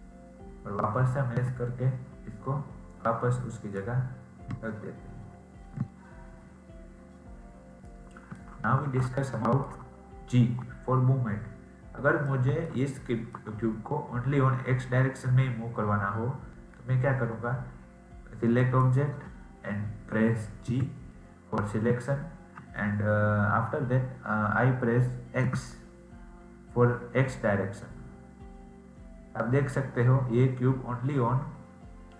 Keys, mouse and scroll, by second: 1.3 s, 6.6-7.8 scroll up 5, 7.8 middle click, 8.6-9.3 scroll up 2, 9.3-11.5 shift+middle drag, 11.5-12.2 scroll down 1, 12.2-15.9 middle drag, 18.5 click.